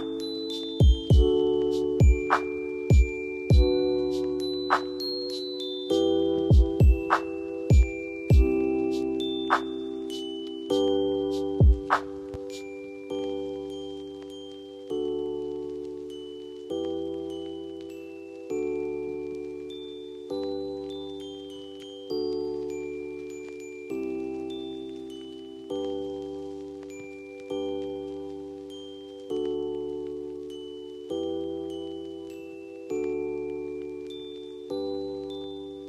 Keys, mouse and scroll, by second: 9.7 ctrl+space, 11.3 click, 15.6 click, 16.4 F4, 18.3 click, 20.7-22.1 shift+drag, 22.1 Down, 23.1-29.5 drag, 29.5 right click, 30.8 F2, 31.1-33.1 drag, 33.8 shift+click, 34.5-35.5 typing.